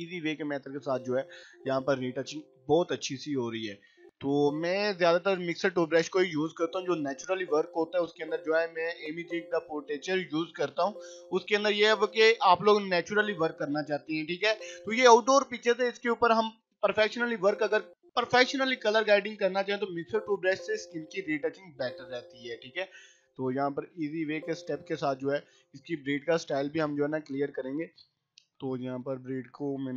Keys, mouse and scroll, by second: 0.6 [, 0.7-1.3 click, 1.3 ], 1.5-2.7 click, 3.0-3.9 click, 3.7 [, 3.9 [, 4.1 [, 4.5-6.1 drag, 5.8-9.0 typing, 6.8 click, 7.3-7.9 click, 8.1 click, 9.1-10.6 click, 10.4 ], 10.6 ], 10.9 click, 11.3 [, 11.6 [, 11.9-12.9 click, 12.8 [, 13.0-14.3 click, 14.2 ], 14.4-16.3 click, 15.5 ], 15.7 click, 16.9-20.2 typing, 17.3-17.9 click, 18.1 click, 19.9 click, 20.4-21.6 click, 21.3 [, 21.4 [, 21.8-23.0 drag, 24.1 [, 24.2 click, 25.2 scroll down 1, 27.5 click.